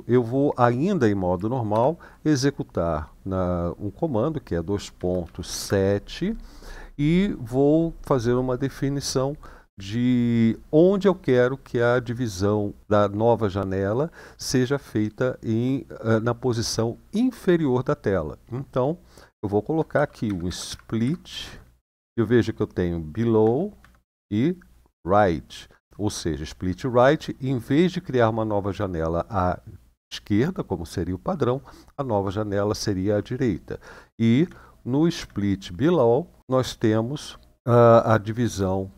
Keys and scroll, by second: 1.5 typing, 4.7-5.3 typing, 19.7-20.8 typing, 21.2 Tab, 23.1 Tab, 23.5 Tab, 34.2 Tab, 35.0 Tab.